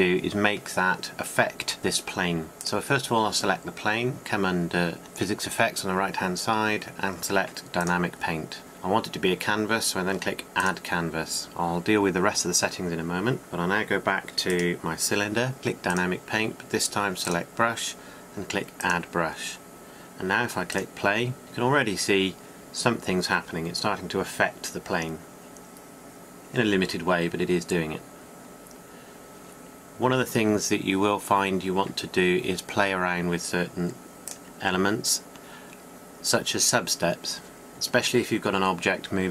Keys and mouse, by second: 0.0-3.1 drag, 3.1-9.1 middle drag, 11.6 middle click, 11.8-18.1 drag.